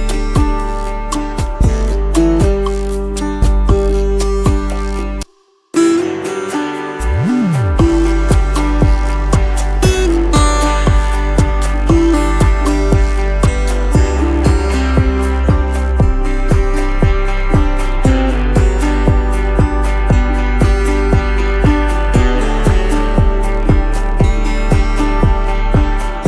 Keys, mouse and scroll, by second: 2.3 double click, 5.7 shift+click, 6.1 right click, 8.6 space, 9.6 double click, 9.7 space, 15.1 double click, 15.2 space, 22.4 double click, 24.1 space, 25.0 right click.